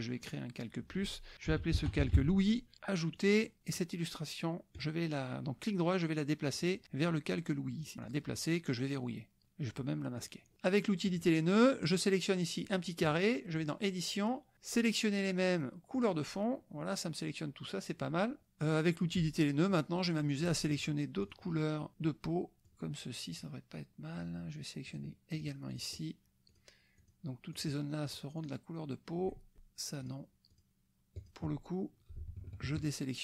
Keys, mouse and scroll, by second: 0.2 click, 1.7 o, 2.0 i, 3.2 click, 3.6 click, 4.7 right click, 6.6 click, 7.8 click, 8.0 click, 10.2 click, 11.1 click, 11.8 click, 13.6 click, 15.9 click, 19.1 click, 19.7 click, 21.2 shift+click, 21.9 shift+click, 22.6 shift+click, 24.9 shift+click, 25.4 shift+click, 25.8 shift+click, 26.5 shift+click, 27.0 shift+click, 27.5 shift+click, 28.1 shift+click, 28.4 shift+click, 30.1 shift+click, 30.5 shift+click, 31.2 shift+click, 32.7 shift+click.